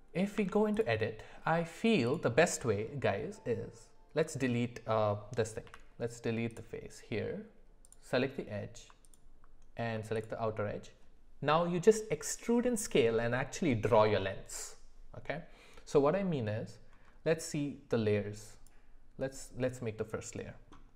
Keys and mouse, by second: 0.4 Tab, 4.1 Delete, 5.6 x, 7.8 click, 10.2 alt+click.